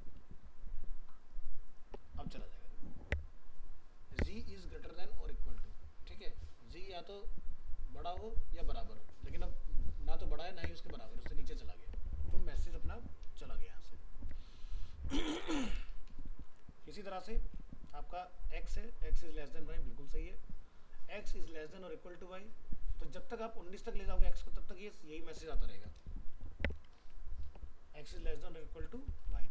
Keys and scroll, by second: 13.8 alt+Tab, 16.5 ctrl+s, 26.6 ctrl+s, 27.1 alt+Tab.